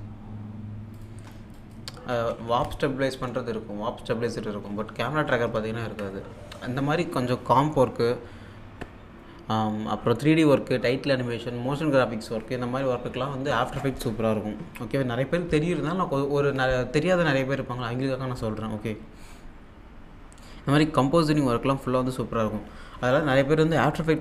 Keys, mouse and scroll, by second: 0.8 scroll up 1, 1.0 click, 2.2-3.2 typing, 5.6 alt+Tab.